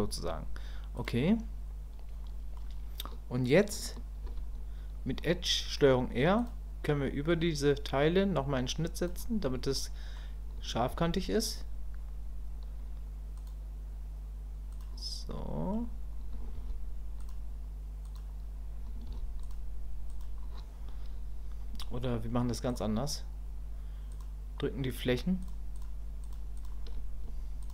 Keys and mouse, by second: 1.0 click, 2.3 click, 4.2 ctrl+r, 9.8 click, 15.4 click, 22.7 click, 24.1 click, 25.1-26.6 shift+middle drag, 26.6 shift+click.